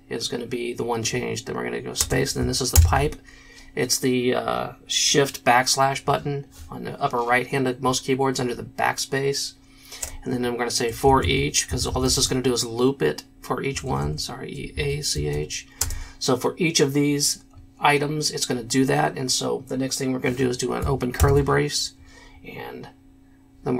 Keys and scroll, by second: 2.2 space, 2.7 shift+\, 10.2-12.5 typing, 13.7 BackSpace, 13.8 BackSpace, 14.0 BackSpace, 15.1 BackSpace, 15.3 a, 15.8 c, 21.2 shift+[.